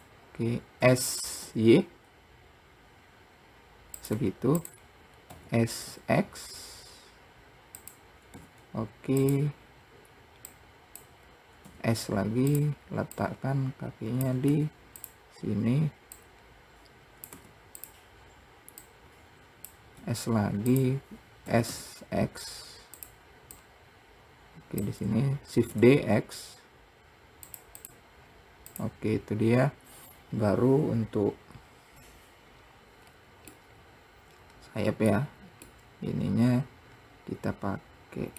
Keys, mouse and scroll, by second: 1.1 s, 5.6 s, 8.7 s, 9.9 scroll up 1, 10.8 click, 11.5 scroll up 2, 12.0 s, 13.5 click, 16.5 click, 19.1 click, 20.3 s, 21.7 s, 23.9 click, 25.8 shift+d, 28.1 click, 28.5-29.0 scroll down 1, 29.0 click, 29.9-31.4 scroll down 2, 33.3-33.9 scroll up 2, 33.9-38.3 middle drag.